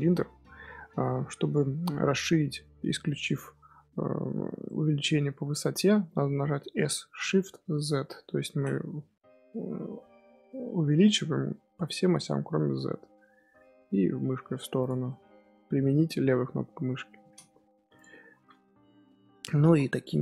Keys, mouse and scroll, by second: 6.7 s, 15.0-17.7 middle drag, 17.7 3, 17.9 click, 18.3 z, 18.8 middle click, 19.5 g.